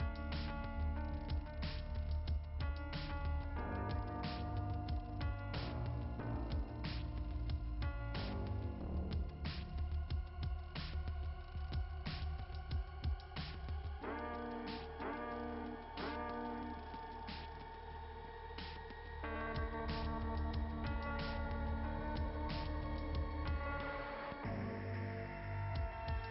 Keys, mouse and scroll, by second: 1.7 click, 2.5-3.7 scroll down 2, 4.5 click, 6.3 click, 6.6 click, 6.7 click, 6.9 click, 10.1 ], 10.2 ], 10.5 click, 11.9-13.1 typing, 14.5 ], 15.1 ], 15.3 ], 15.6 ], 21.5 [, 21.9 click, 22.2 click, 22.5 click, 22.9 click, 24.2 click.